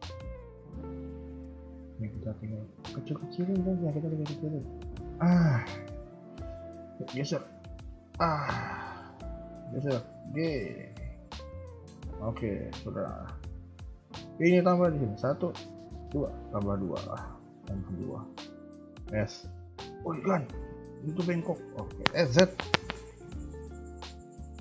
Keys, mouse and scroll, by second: 2.3 g, 6.0 alt+click, 6.7 g, 8.4 a, 8.7 a, 9.1 b, 10.1 g, 12.1 shift+middle click, 12.7 a, 12.9 a, 14.8 ctrl+r, 17.2 a, 17.4 a, 17.6 KP_3, 18.8 alt+click, 19.4 KP_1, 19.5 KP_3, 22.0 s.